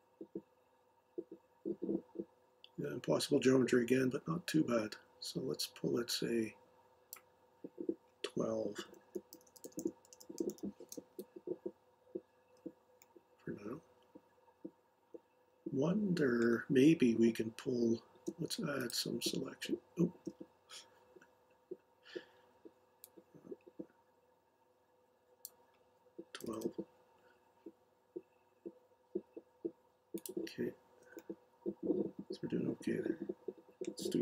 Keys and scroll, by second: 9.1 shift+Left, 9.3 shift+Left, 9.5 shift+Left, 9.6 shift+Left, 9.8-10.1 shift+Left, 11.1 Delete, 26.1-26.9 typing.